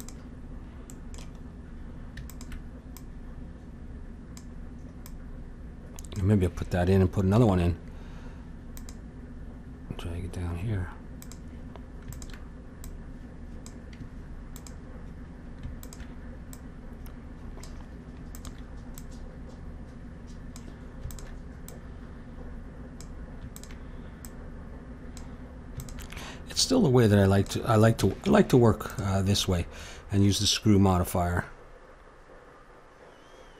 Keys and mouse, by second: 2.3-6.9 drag, 7.4 ctrl+r, 12.1-20.8 drag, 21.1-23.5 drag, 27.3 click, 28.0 a, 28.3 Tab, 29.5-31.8 middle drag, 31.8 click.